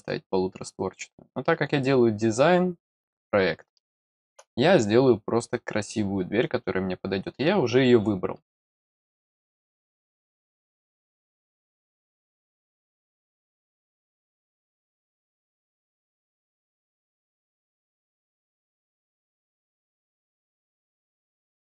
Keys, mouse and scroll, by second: 1.4 scroll up 1, 1.6-3.5 scroll down 1, 3.8 middle click, 9.3 click, 16.3 click, 18.8 click, 19.4 click, 20.4 click.